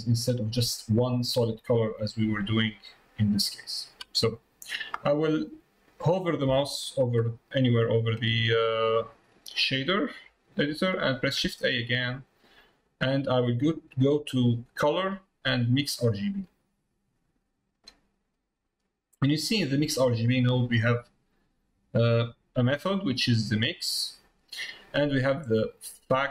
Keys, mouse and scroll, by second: 2.5 click, 4.3 click.